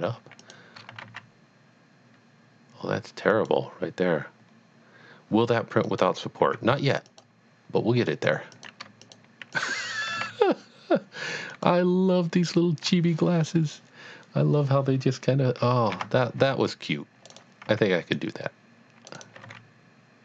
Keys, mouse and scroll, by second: 0.4 shift+double click, 1.0 e, 1.1 z, 3.3 click, 6.1 click, 6.4 x, 7.0 click, 8.0 scroll down 1, 8.5 click, 9.0 shift+click, 9.5 shift+double click, 10.1 g, 10.5 z, 11.5 click, 15.9 click, 16.0 a, 16.5 c, 16.7 click, 17.0 click, 17.3 right click, 17.8 c, 18.3 click, 19.2 right click, 19.4 g.